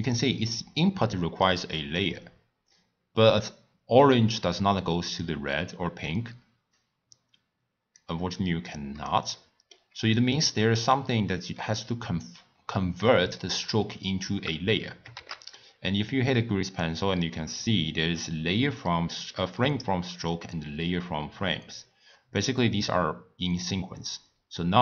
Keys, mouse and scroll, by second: 0.5-1.1 middle drag, 1.1-2.0 drag, 3.4 click, 6.7 click, 8.7 click, 9.3 middle click, 10.2-13.2 drag, 15.1 shift+a, 24.2 drag.